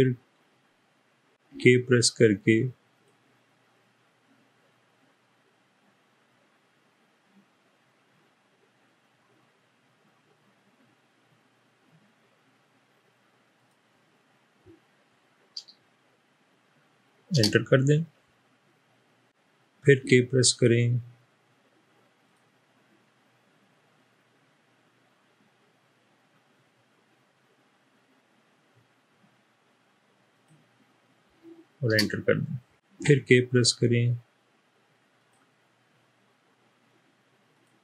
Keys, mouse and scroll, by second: 1.5 k, 2.9 click, 13.5 click, 17.3 Return, 20.0 k, 30.2 click, 31.9 Return, 33.0 k, 35.2 click, 37.4 click.